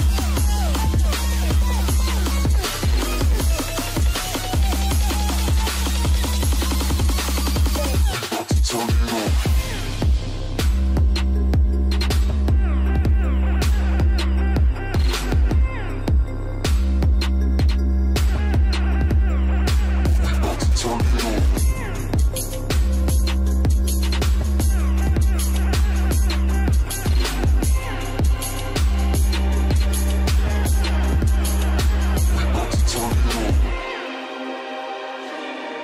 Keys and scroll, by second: 9.6 space, 13.1 ctrl+space, 14.0 ctrl+alt+space, 23.2 space, 24.3 alt+space, 34.8 ctrl+alt+space.